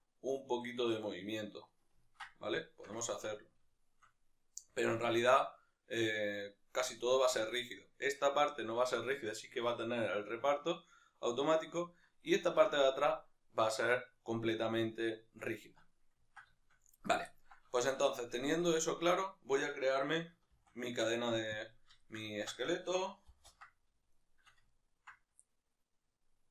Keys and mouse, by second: 11.3-11.9 right drag, 11.9-26.5 ctrl+middle drag, 21.6 shift+a, 23.4 ctrl+space.